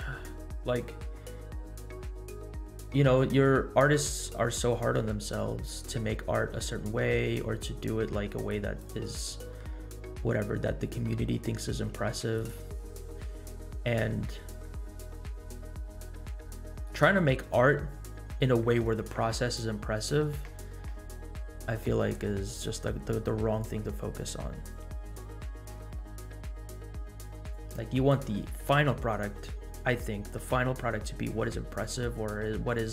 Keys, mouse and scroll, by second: 0.2-0.9 scroll down 3, 0.9-1.5 scroll down 6, 2.2-3.0 scroll down 6, 2.7 middle click, 3.2-3.6 scroll down 1, 3.6-4.2 scroll up 2, 4.2 middle click, 4.9 scroll up 1, 5.6 middle click, 6.6 scroll up 1, 8.4-8.9 drag, 9.2 middle click, 9.8-10.3 scroll up 3, 10.3 middle click, 10.8-11.4 scroll up 4, 11.9 g, 12.7-13.3 scroll down 4, 14.2-14.6 scroll down 7, 14.6 middle click, 27.7 click.